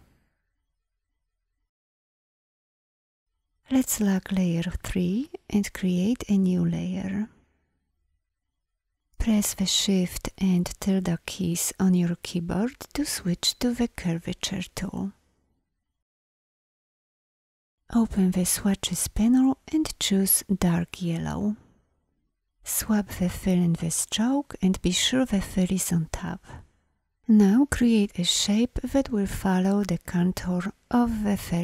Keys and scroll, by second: 0.9 ctrl+0, 9.5 shift+`.